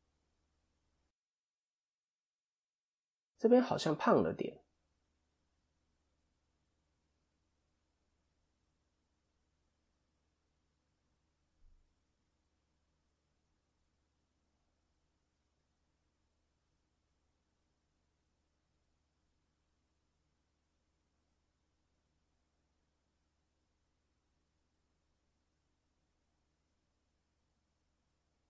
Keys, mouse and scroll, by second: 1.8-2.7 scroll down 3, 2.3-2.7 scroll up 1, 4.3 KP_7, 5.0 scroll up 2, 5.3 shift+middle click, 6.3 click, 7.5-8.3 scroll down 2, 9.2 click, 12.0 click, 16.8 click, 17.3 ctrl+KP_3, 21.6 click, 25.0 KP_7, 25.8-26.2 scroll up 1, 26.3 shift+middle click, 27.0 scroll up 1, 27.2 middle click.